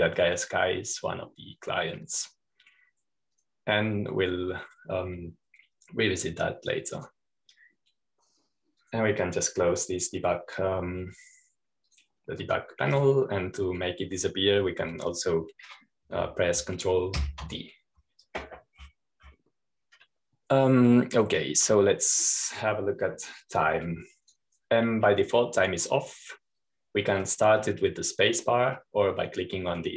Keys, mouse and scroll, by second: 0.0-1.6 drag, 2.2 click, 5.3-7.4 drag, 8.9 click, 10.7-12.7 drag, 13.8-15.5 drag, 19.3 ctrl+d, 20.6-21.7 scroll down 1, 21.7-22.3 scroll down 1, 22.3-23.8 scroll down 1, 25.4-27.5 drag, 27.9-29.1 drag.